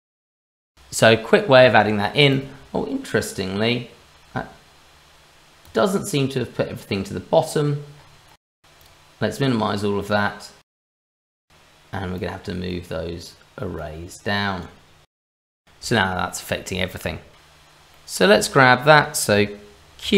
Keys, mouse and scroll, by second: 0.3 shift+middle click, 0.9-1.6 scroll down 1, 1.6 shift+middle click, 2.3 click, 5.6 click, 7.9-9.6 scroll up 4, 9.7 click, 10.0 click, 12.0 click, 12.8 click, 15.6 click, 15.6 scroll down 1, 15.9 shift+middle click, 16.3 middle click, 17.0 shift+middle click, 17.3 ctrl+z, 17.3 middle click, 17.9 middle click, 18.4 shift+middle click, 18.6 shift+middle click, 20.0 q.